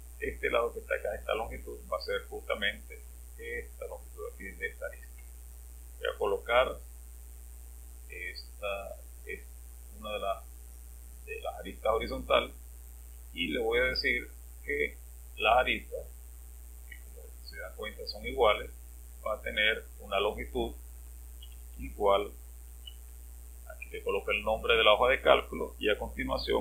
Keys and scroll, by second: 21.4-23.3 typing, 26.4-26.6 typing.